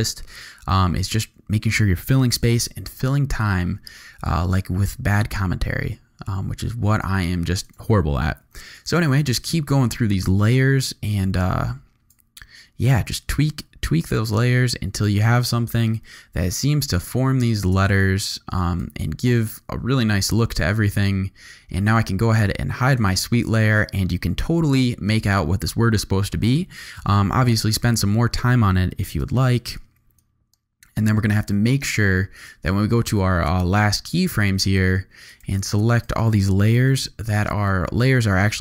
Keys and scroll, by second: 2.3 u, 8.4 u, 15.8 u, 29.2 n, 36.9 shift+u.